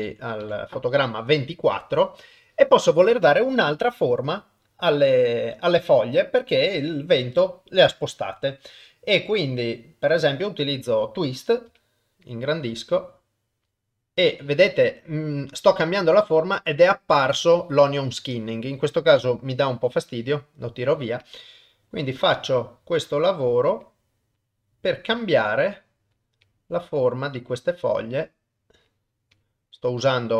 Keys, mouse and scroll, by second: 0.4 Left, 10.1-11.7 drag, 11.7 f, 12.8 click, 18.3-20.7 drag, 21.2 click, 22.1-23.5 drag, 23.8 click, 25.1-28.8 drag, 29.4-30.3 drag.